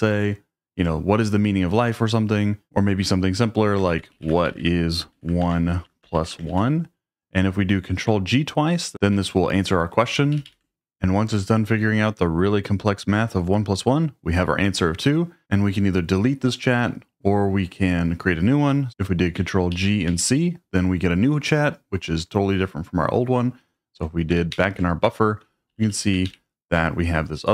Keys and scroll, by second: 2.6 i, 3.7-7.0 typing, 10.3 ctrl+g, 10.5 ctrl+g, 18.9 Escape, 19.7 ctrl+g, 20.1 c, 24.5 ctrl+o, 25.7 typing, 26.3 ctrl+o.